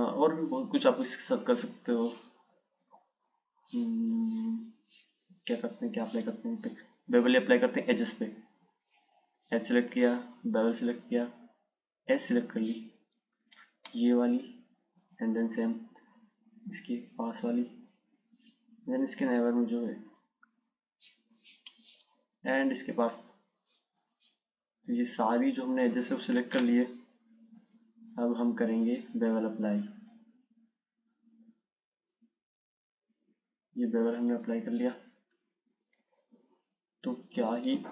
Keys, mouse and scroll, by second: 8.9-12.7 drag, 15.3 shift+click, 17.5 shift+click, 19.1 shift+click, 21.6 shift+click, 23.3 shift+click, 26.0 shift+click, 27.8 click, 35.1 click.